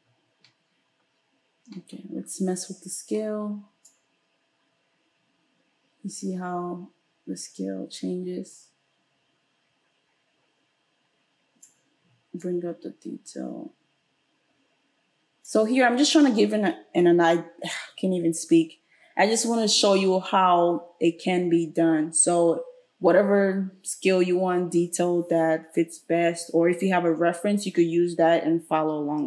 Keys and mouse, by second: 3.9-29.2 drag.